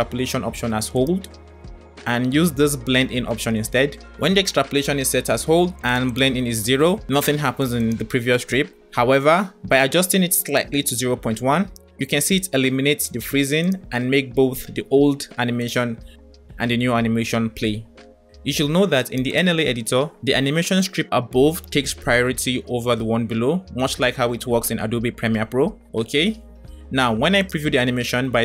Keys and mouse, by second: 5.8 click, 7.8 click, 10.8 click, 13.6-14.6 drag, 15.4-17.0 drag, 27.3-28.4 drag.